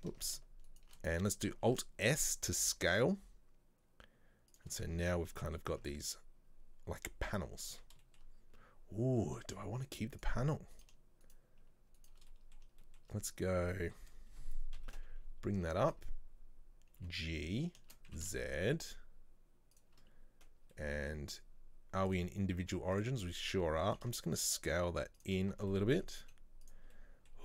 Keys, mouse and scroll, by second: 0.2 ctrl+z, 0.7 alt+shift+right click, 1.6 alt+s, 4.8-5.3 scroll down 2, 5.3 middle click, 5.8 Tab, 5.9 scroll down 1, 6.2-7.3 middle drag, 7.3-7.8 scroll up 2, 7.8 Tab, 8.1-10.2 shift+middle drag, 10.2 click, 10.8 right click, 11.3 shift+right click, 12.0 shift+right click, 12.3 middle click, 12.8-13.7 shift+scroll up 2, 12.9 shift+middle click, 13.7-14.8 middle drag, 14.8 KP_3, 15.9-17.1 scroll up 1, 17.1 g, 20.9 middle click, 21.2-21.5 scroll down 2, 22.1-24.0 drag, 24.0 s, 25.5 scroll down 1, 25.6 Tab, 25.8-26.3 middle drag, 26.3 z, 27.0-27.4 middle drag.